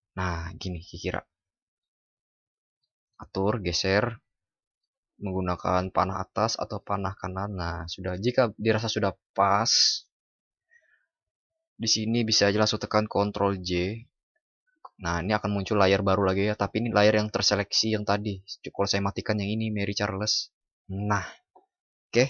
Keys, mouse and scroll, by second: 13.4 ctrl+j.